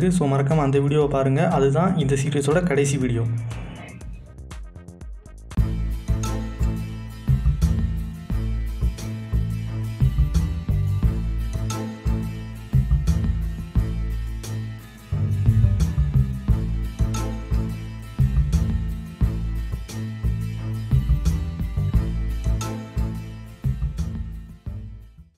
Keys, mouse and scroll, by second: 1.6 click, 3.6 click.